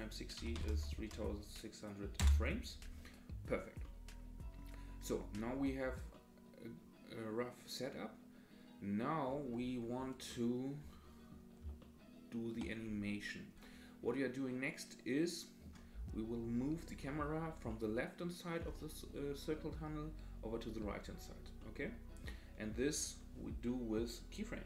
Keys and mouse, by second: 3.9-4.7 drag, 6.1-7.9 drag, 8.1-9.2 drag, 10.5-11.5 drag, 12.0-12.5 shift+drag, 14.2-15.7 drag, 17.7-18.6 drag, 21.7 middle click.